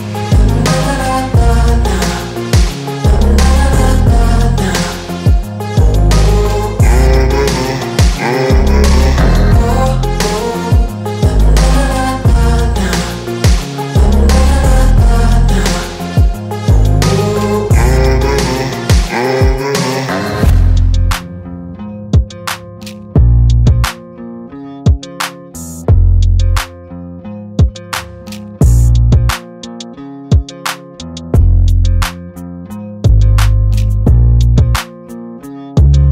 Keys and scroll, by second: 0.8 f, 2.7 Return, 3.9 s, 5.1 space, 5.6 p, 6.5 Return, 7.9 Escape, 9.4 l, 10.9 Return, 11.4 r, 12.7 space, 13.9 p, 15.1 Return, 16.1 m, 17.6 Return, 18.0 p, 19.2 Return, 20.5 p, 21.0 space, 21.5 p, 22.5 Return, 27.0 l, 31.0 Return, 34.1 space, 34.7 p, 35.7 space.